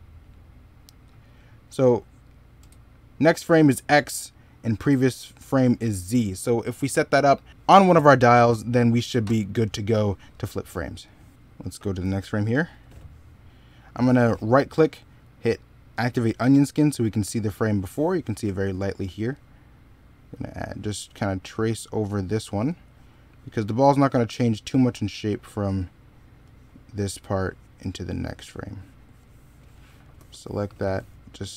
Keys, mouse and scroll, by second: 10.3 middle click, 11.8 x, 14.2 right click, 16.4 middle click, 29.5 middle click, 30.0 s.